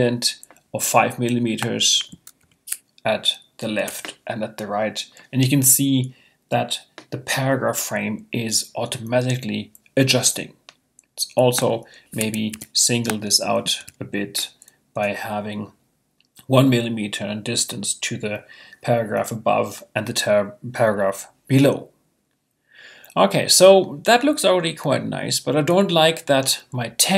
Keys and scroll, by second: 2.4 5, 3.8 Tab, 12.5 |, 14.9 Return.